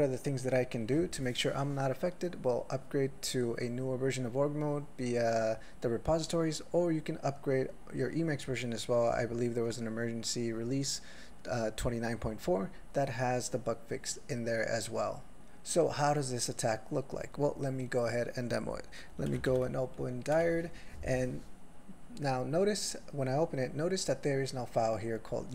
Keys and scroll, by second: 19.5 ctrl+f.